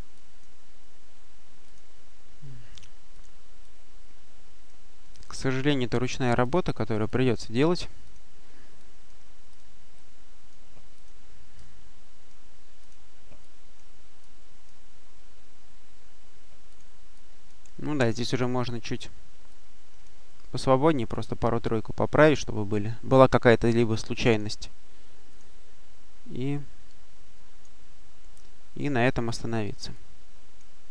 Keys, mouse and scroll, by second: 0.6-1.5 scroll up 2, 1.8-2.6 scroll up 2, 3.0 click, 5.5 click, 6.3 click, 7.0-7.7 drag, 7.9 click, 8.7-9.9 drag, 10.8 click, 11.4-12.6 drag, 12.7 click, 13.3 click, 14.7-15.8 scroll up 1, 16.6 click, 17.9-19.3 drag, 19.4 click, 21.0 click, 23.0 click, 23.7 click, 25.2 click, 26.4-27.8 drag, 27.8-28.3 scroll up 1, 29.1 click, 29.8 click.